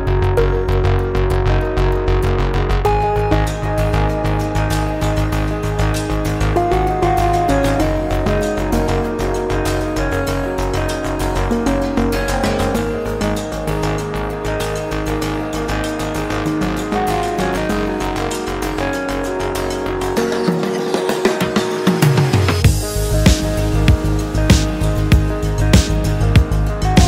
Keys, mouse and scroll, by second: 0.5-1.5 middle drag, 1.4 scroll up 1, 2.1 click, 3.2 middle click, 3.2 scroll up 1, 4.5-6.4 drag, 7.9 click, 10.9 click, 11.8 click, 15.7 click, 16.9 click, 18.9 click, 20.4 click, 21.1-22.6 typing, 24.4 click, 26.3-27.0 drag.